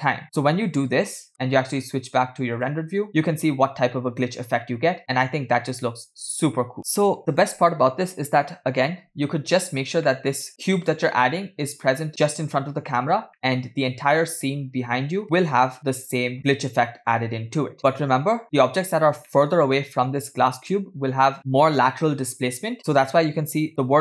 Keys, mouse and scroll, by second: 0.2 click, 0.2 space, 1.3 space, 1.3 KP_0, 2.8 click, 3.1 space, 4.0 space, 4.2 space, 7.6 space, 10.2 space, 10.3 middle click, 10.5 scroll down 2, 10.8 click, 11.2-11.7 middle drag, 12.1 click, 12.3 middle click, 13.5 middle click, 15.2 g, 16.4 KP_0, 16.8 space, 18.4 space, 19.4-19.9 middle drag, 20.1-20.7 scroll down 2, 20.7 middle click, 22.3 KP_0, 23.7 click.